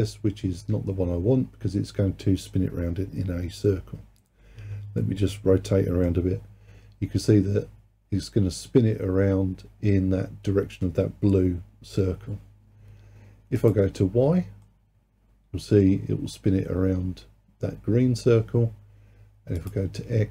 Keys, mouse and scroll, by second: 5.0-8.1 middle drag, 13.6 click, 14.7-17.7 middle drag, 19.6 click.